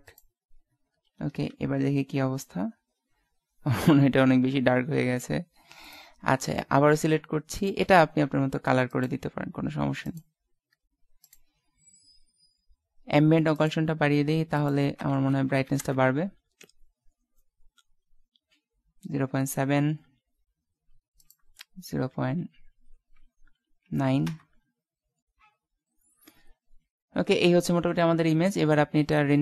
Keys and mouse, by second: 0.6 right click, 1.5 shift+z, 6.0-7.8 right drag, 7.6 click, 7.8-9.3 drag, 11.3-13.1 drag, 13.4-16.1 drag, 21.2-22.8 drag.